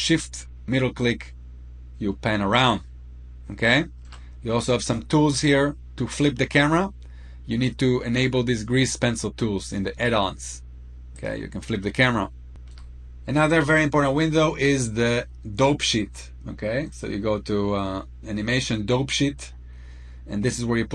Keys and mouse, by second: 0.0-3.8 shift+middle drag, 10.9 click, 16.7 click.